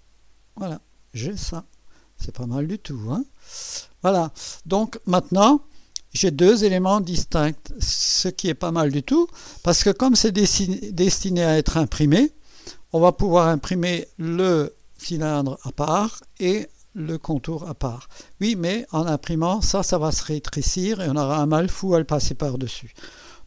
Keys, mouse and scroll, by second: 0.7-2.0 drag, 2.2 click, 3.2 right click, 4.1 click, 6.5 click, 7.1 space, 8.0 space, 14.5 space, 15.7 space, 18.7-19.7 drag.